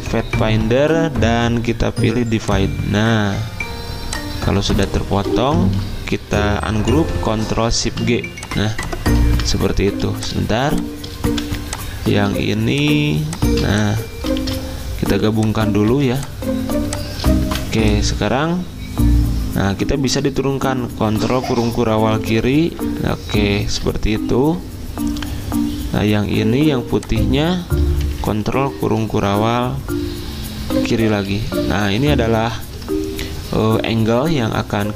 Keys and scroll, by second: 5.6 ctrl+z, 9.3 ctrl+z, 14.4 ctrl+z, 14.4 v, 15.9 z, 17.5 v, 21.2 ctrl+[, 21.5 ctrl+[, 21.7 ctrl+[, 21.8 ctrl+[, 31.3 ctrl+].